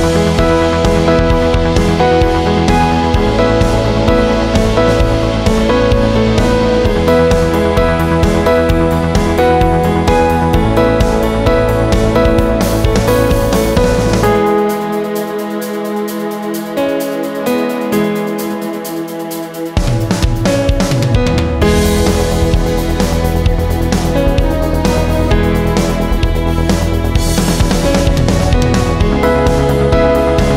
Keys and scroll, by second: 0.0-1.1 typing, 18.1 ctrl+a, 19.3 ctrl+c, 22.8 ctrl+v, 24.1 ctrl+t.